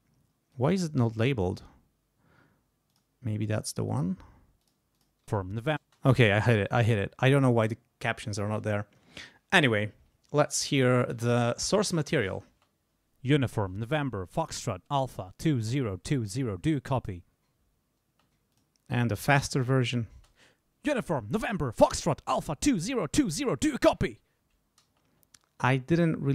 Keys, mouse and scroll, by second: 0.5 click, 2.9 click, 3.9 click, 4.6 click, 4.9 click, 5.2 space, 6.7 click, 12.5 space, 18.1 space, 18.5 click, 20.1 space, 24.8 space.